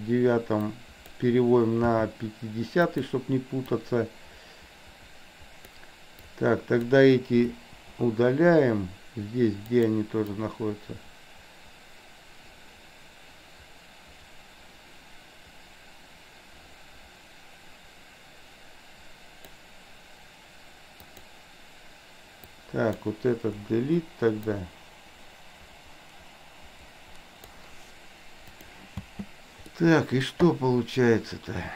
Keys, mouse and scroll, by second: 0.7-1.0 drag, 1.9 g, 3.9-5.8 drag, 6.2-6.9 drag, 7.5 Delete, 9.8 click, 10.4-19.7 drag, 21.0 click, 22.5-23.0 drag, 23.7 Delete, 24.7-27.7 drag, 28.5 click, 29.0 space, 29.8-30.4 middle drag.